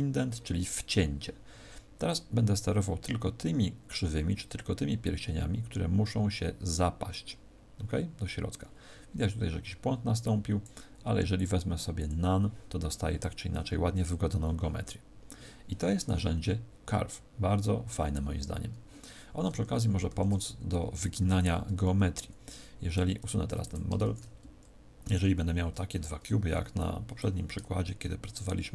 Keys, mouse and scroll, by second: 2.0 click, 11.3 click, 19.4 Tab, 20.0 Tab, 22.9 Tab, 23.4 x, 23.9 shift+a, 25.9-26.4 scroll down 5, 27.1 click, 27.1-28.0 scroll down 2.